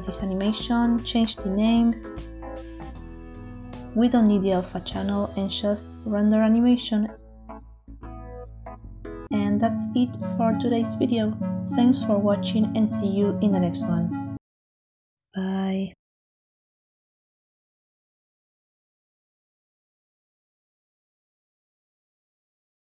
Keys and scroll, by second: 0.0-2.2 typing.